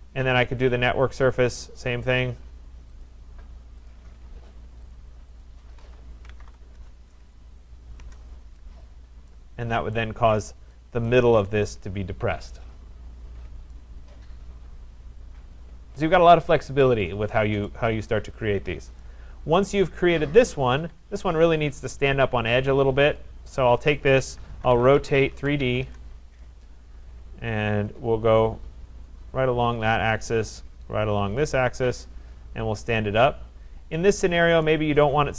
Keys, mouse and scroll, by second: 0.7 click, 1.8 click, 3.0 shift+click, 3.9 click, 5.0 click, 5.4 shift+click, 6.0-6.9 typing, 8.0 Return, 8.8 scroll, 9.9 right click, 10.7 right click, 11.5 right click, 16.0 right click, 16.8 right click, 17.7 right click, 19.0 right click, 19.2-19.6 scroll, 19.6 middle click, 19.7 middle click, 19.8 middle click, 20.8 Escape, 21.1 middle click, 21.2 middle click, 22.4 scroll, 22.5 right click, 23.8 click, 24.3-26.1 typing, 28.0 click, 29.9 click, 31.4 click, 34.7 right click.